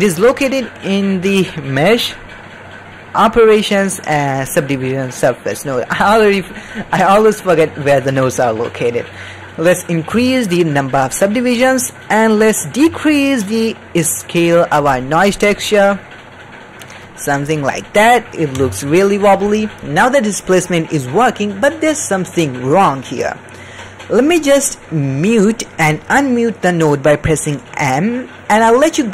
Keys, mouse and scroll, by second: 9.0 middle click, 10.1 click, 11.0 middle click, 11.7 middle click, 12.1 middle click, 12.9-18.0 shift+drag, 18.4 middle click, 18.7 ctrl+middle drag, 19.2 middle drag, 19.6 ctrl+middle click, 24.4 middle click, 25.3 middle click, 25.7 click.